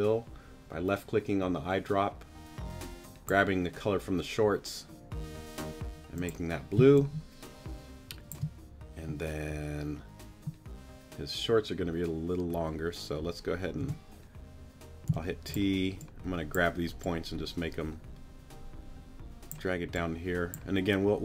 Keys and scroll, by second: 6.8 space, 13.8 t, 15.1 t.